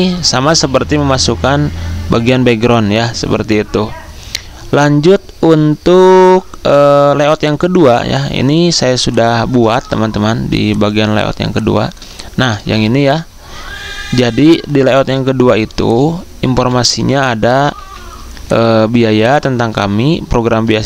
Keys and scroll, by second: 10.5 z, 12.7 ctrl+z, 14.9 z, 16.5 v, 17.7 ctrl+z.